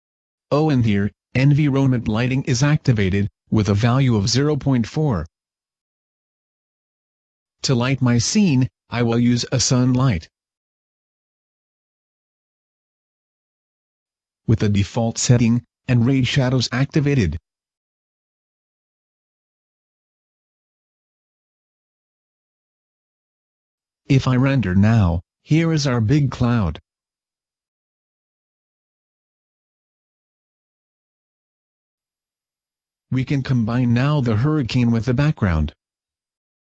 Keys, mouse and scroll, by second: 0.3-2.4 scroll down 2, 2.4 click, 2.7-3.9 scroll up 1, 3.9 click, 6.1 click, 6.8 right click, 8.2 x, 9.7 click, 10.7 right click, 10.9 middle click, 12.3 m, 14.3 click, 16.1 middle click, 23.1 click, 31.8 Escape, 31.8 scroll down 1, 33.3 shift+middle click, 34.6 shift+click, 35.6 middle click, 36.4 right click.